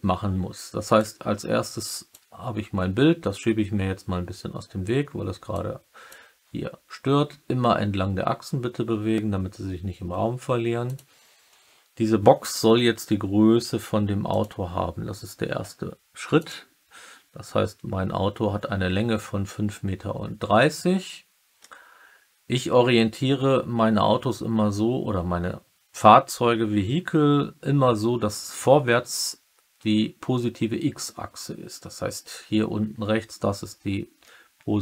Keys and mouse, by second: 1.0-2.0 drag, 5.4 click, 10.8 click, 34.2-34.7 middle drag.